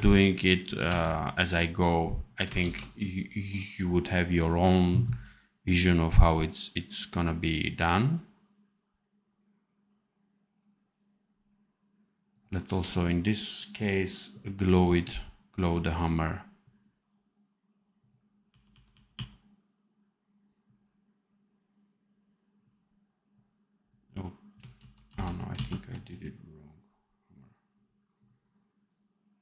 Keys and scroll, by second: 0.8 v, 2.6 ctrl+s, 18.4 r, 19.1 r, 24.7 ctrl+z.